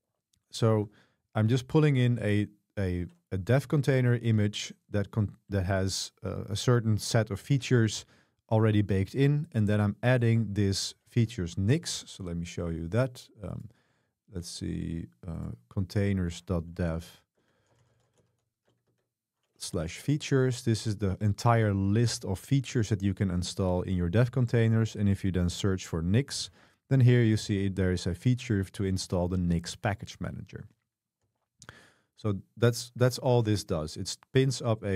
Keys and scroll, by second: 2.1 super+3, 12.7 super+3, 17.9-19.1 typing, 19.8 Page_Down, 20.1 Return, 20.1 scroll down 1, 27.4-28.2 typing, 31.3 super+3, 34.3-34.9 typing.